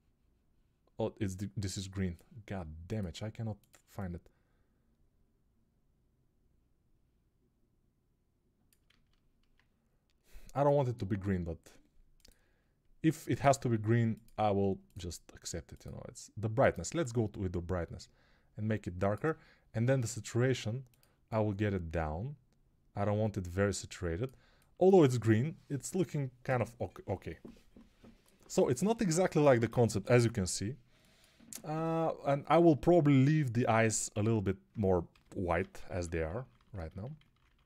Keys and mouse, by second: 8.8 ctrl+z, 34.1 alt+q, 35.0-37.2 typing.